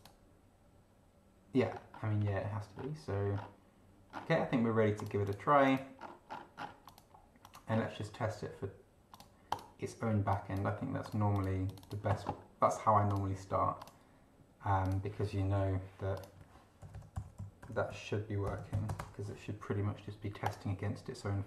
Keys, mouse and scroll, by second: 1.7-2.4 scroll up 4, 2.7 scroll up 2, 3.4 scroll down 2, 4.1 scroll down 2, 5.0 click, 5.6 click, 6.0 scroll down 1, 6.9 click, 7.4 click, 7.7 scroll up 1, 9.1 click, 9.5 click, 10.3 click, 11.0 click, 11.7 click, 13.1 click, 13.8 click, 14.8 click, 15.6 Delete, 16.2 click, 16.6-19.2 typing, 20.4 click.